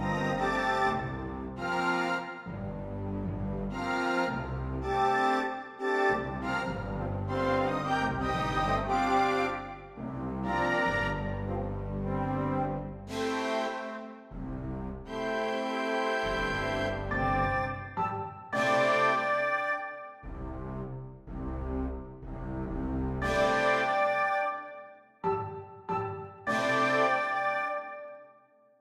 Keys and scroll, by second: 3.1 [, 5.6 ], 9.8 ], 13.0 ], 14.1 ], 16.1 ], 20.0 ], 21.1 [, 22.1 ], 22.5 [, 25.1 [, 25.7 ].